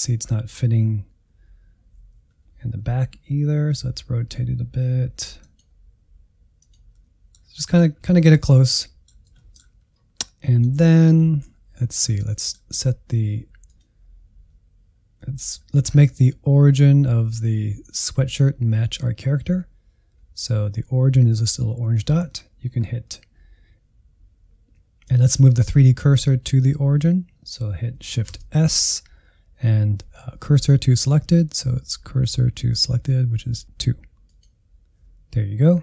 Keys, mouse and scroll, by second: 3.7 r, 5.9 g, 6.9-8.0 middle drag, 8.0-8.3 scroll down 1, 8.3-9.8 middle drag, 9.8-10.5 scroll down 1, 10.5 middle click, 11.2 Tab, 12.3-13.6 middle drag, 13.6-15.2 drag, 15.2-28.2 middle drag, 28.2 shift+s.